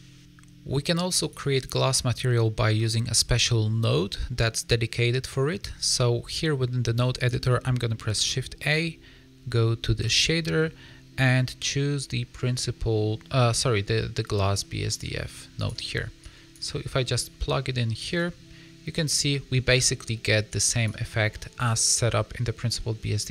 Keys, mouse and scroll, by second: 1.2 click, 3.3-3.8 scroll down 6, 3.8 middle click, 5.3 scroll down 1, 7.1 click, 8.1 shift+a, 16.1 click, 17.1 click, 18.9 middle click, 20.4 click, 21.1 scroll down 4, 21.2 middle click.